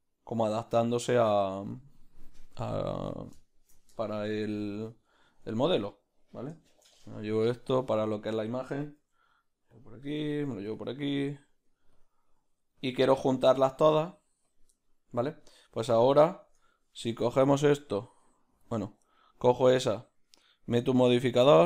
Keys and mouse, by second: 3.4-5.5 shift+middle drag, 4.1 shift+d, 5.5 ctrl+z, 5.9 right click, 6.7 shift+d, 9.0 r, 14.7-16.0 middle drag, 16.0-21.6 shift+right drag.